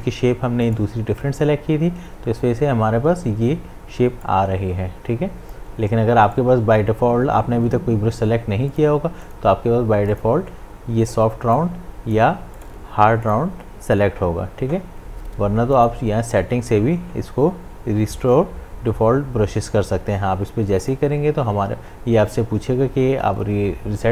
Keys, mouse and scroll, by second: 2.7 right click, 4.2-6.2 drag, 6.2 right click, 8.7 click, 12.5 right click, 13.2 click, 15.7 click, 20.8 click.